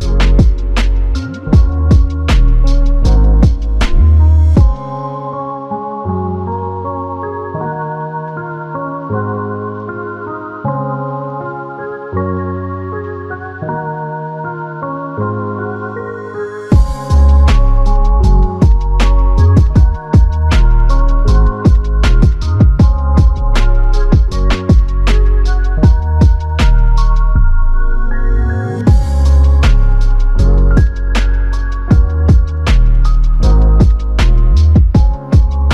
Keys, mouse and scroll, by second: 0.4 ctrl+click, 4.3 ctrl+click, 5.8 shift+click, 6.9 ctrl+click, 8.2 ctrl+click, 11.1 alt+click, 14.4 shift+click, 17.2 alt+click, 26.7 alt+click, 30.5 shift+click, 32.6 shift+click, 35.2 alt+click.